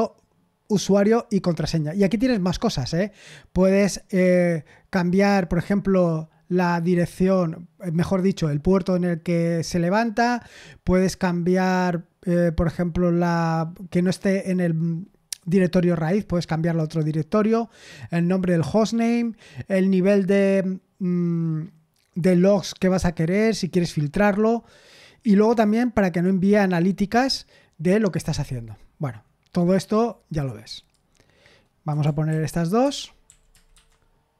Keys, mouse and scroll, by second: 2.2-3.2 scroll up 1, 3.8-7.3 scroll up 1, 30.7 click, 31.0 click, 32.2 ctrl+v, 32.8 Escape, 33.0-34.3 typing.